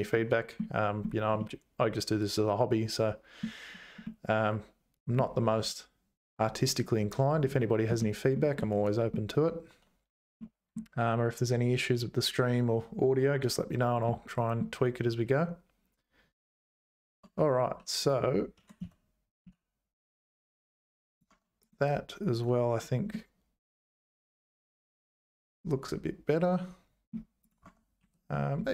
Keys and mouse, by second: 0.1 middle click, 1.4-3.4 middle drag, 4.0-5.2 middle drag, 8.0 shift+middle click, 8.6 middle click, 10.4 middle click, 14.0 middle click, 16.9 click, 17.2 Tab, 17.6 2, 18.0 click, 18.6 g, 21.3 Tab, 21.6 click, 22.3 click, 23.1-27.1 middle drag, 27.6 Tab, 28.0 2, 28.3 middle click.